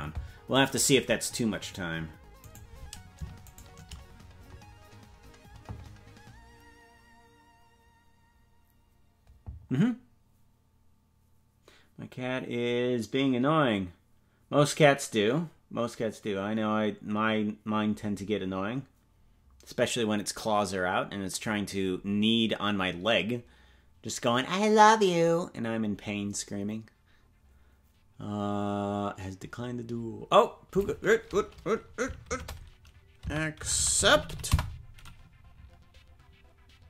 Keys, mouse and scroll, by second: 2.2 ctrl+s, 2.5-3.5 right drag.